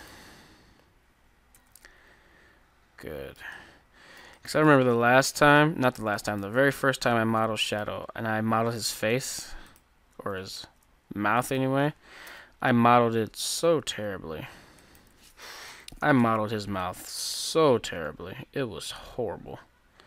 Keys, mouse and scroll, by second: 0.1-1.2 drag, 1.6 Tab, 1.9-3.9 middle drag, 6.6 Tab, 7.5-8.5 middle drag, 9.0-13.2 right drag, 10.7 ctrl+z, 12.2 KP_3, 13.8 g, 15.7 alt+o, 16.6 g.